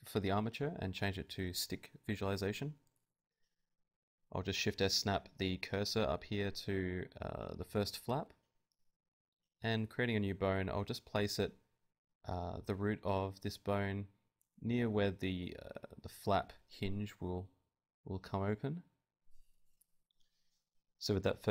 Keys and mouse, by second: 1.6 click, 1.8 middle click, 1.8 right click, 2.7 Tab, 3.4 Tab, 3.7 Tab, 4.1 z, 4.7 shift+s, 5.4 Tab, 6.4 z, 6.5 Tab, 6.7 shift+a, 10.0 click, 10.9 right click, 11.5 g, 11.8 click, 12.6 g, 13.4 KP_7, 14.2 g, 16.5 ., 16.9 s, 18.3 click, 18.6 right click, 18.6 g, 20.6 n, 21.2 click.